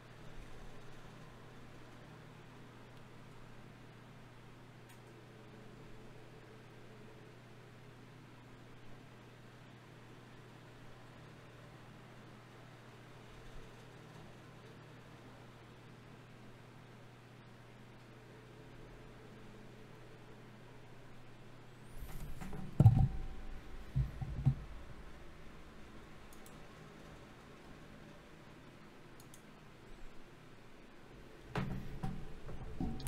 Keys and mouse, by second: 3.4 g, 4.4 s, 4.8-9.1 drag, 9.1 KP_3, 12.5 r, 13.7 r, 14.5 g, 17.1 s, 18.3 r, 19.3 g, 20.3 Tab, 21.1 ctrl+Tab, 22.7 ctrl+Tab, 23.5 z, 25.9 x, 27.2 z, 27.7 ctrl+Tab, 31.0 right click, 32.0 ctrl+z.